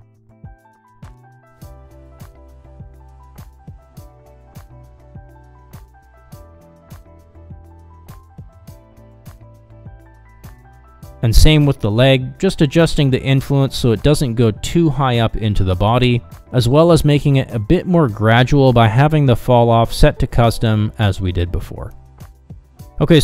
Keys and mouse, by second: 0.1-2.0 drag, 2.2 click, 2.4 middle click, 2.5 middle click, 2.7 middle click, 2.9 middle click, 3.4 click, 3.9 click, 4.8 middle click, 5.1 middle click, 5.4 ctrl+Tab, 6.1 click, 6.6 ctrl+Tab, 7.2 click, 8.0 middle click, 8.1 g, 8.9 r, 9.6 middle drag, 9.9 g, 10.4 middle click, 10.5 g, 12.7-13.5 middle drag, 14.2 middle click, 14.6 click, 14.9 click, 15.1 click, 15.3 click, 15.6 click, 15.8 middle click, 16.0 click, 16.2 click, 16.4 click, 16.6 click, 16.8 click, 17.1 click, 17.2 middle click, 17.5 click, 17.7 click, 17.9 click, 18.1 click, 18.4 middle click, 18.6 click, 18.7 middle click, 18.9 click, 19.1 middle click, 19.2 middle click, 19.4 middle click, 19.7 click, 20.0 middle click, 20.1 click, 20.3 middle click, 20.6 click, 20.8 middle click, 21.1 middle click, 21.5 middle click, 21.8 middle click, 22.3 click, 22.5 click, 22.7 click, 23.0 click, 23.1 click.